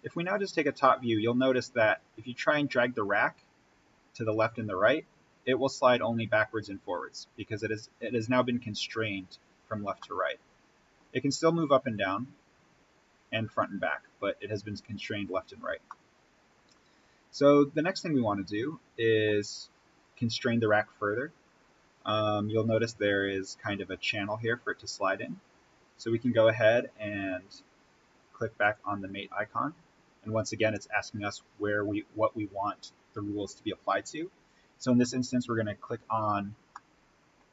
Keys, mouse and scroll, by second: 9.3-9.7 scroll up 1, 9.9-11.8 middle drag, 11.8-13.9 drag, 15.0-15.8 scroll down 1, 15.8-20.0 middle drag, 20.0-23.0 drag, 23.0-23.6 scroll down 1, 25.1-26.6 drag, 36.4-36.7 scroll up 1, 36.7-37.5 middle drag.